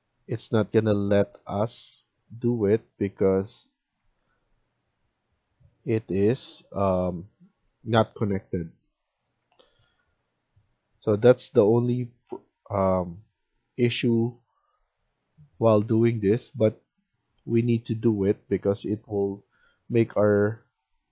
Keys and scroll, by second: 3.9 Escape, 9.3 Escape.